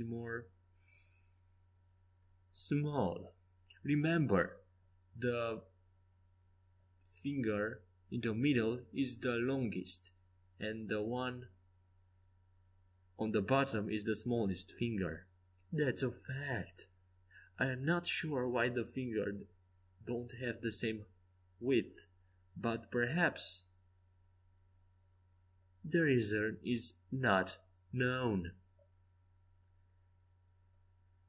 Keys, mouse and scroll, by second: 0.9-2.5 right drag, 1.4 e, 2.7 s, 4.9 right click, 5.3-7.6 drag, 6.3 s, 7.6-9.9 right drag, 8.5 e, 9.4 s, 11.4-13.5 middle drag, 16.1-21.9 middle drag, 25.4-28.1 middle drag, 28.1-31.2 drag, 29.1-31.2 right drag.